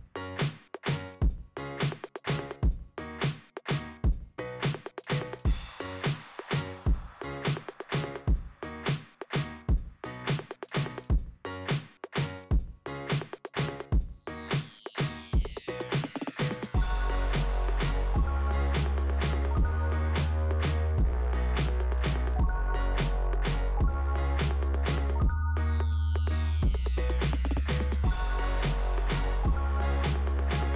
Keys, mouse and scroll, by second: 0.1 click, 1.9 click, 3.9 click, 4.0 click, 8.1-9.6 scroll down 2, 9.6 click, 10.8 click, 12.7 click, 13.9 click, 15.4 click, 16.9 click, 19.9 click, 21.1 click, 22.3 click, 23.8 click, 25.7 click, 25.9 double click, 27.2 double click, 29.2 middle click.